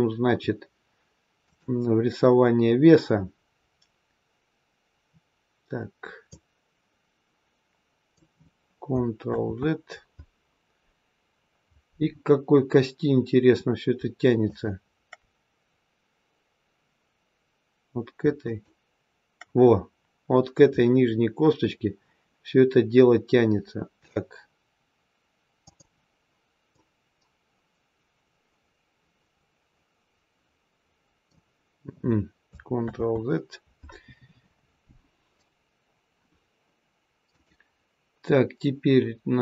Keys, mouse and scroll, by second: 2.7-3.6 scroll up 3, 3.6 scroll down 1, 3.9-5.9 scroll down 1, 6.3 click, 9.3 ctrl+z, 11.2-12.2 scroll down 1, 12.2-13.8 scroll down 1, 14.3 shift+click, 18.3 shift+click, 24.0 click, 26.7 click, 32.8 ctrl+z, 37.2 click.